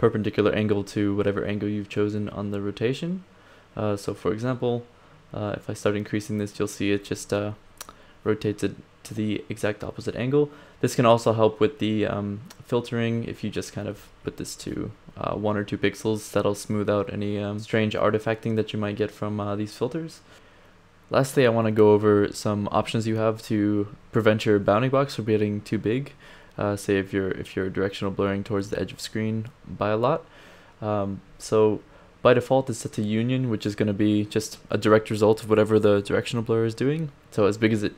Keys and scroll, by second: 13.9 2, 23.9 d, 27.6 d, 34.7 d.